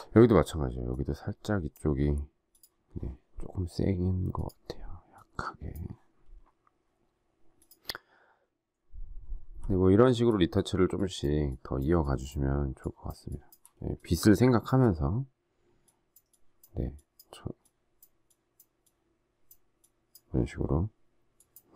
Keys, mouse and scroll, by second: 9.6 alt+scroll down 1, 13.7 space.